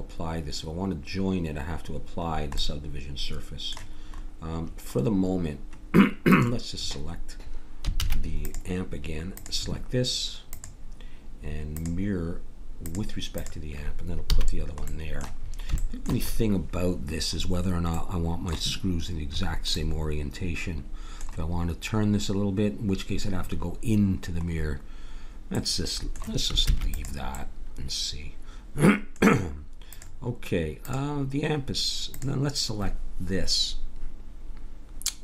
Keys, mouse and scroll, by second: 2.6 middle click, 6.3-7.9 drag, 7.9 shift+s, 9.3-12.4 drag, 12.8-14.5 drag, 14.3 a, 14.5 middle click, 14.9 scroll up 1, 18.0-20.2 middle drag, 26.7 ctrl+s, 30.0-33.9 drag.